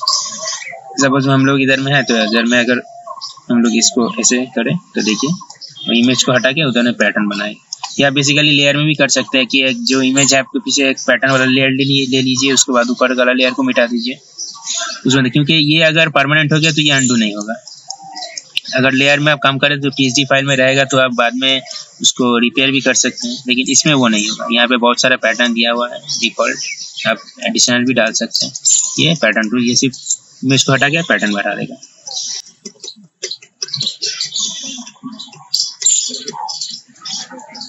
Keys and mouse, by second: 32.0 ctrl+z, 32.3 ctrl+z, 32.4 ctrl+z, 32.6 ctrl+z, 32.8 ctrl+z, 33.0 ctrl+z, 33.2 ctrl+z, 33.4 ctrl+z, 33.6 ctrl+z, 33.8-36.0 typing.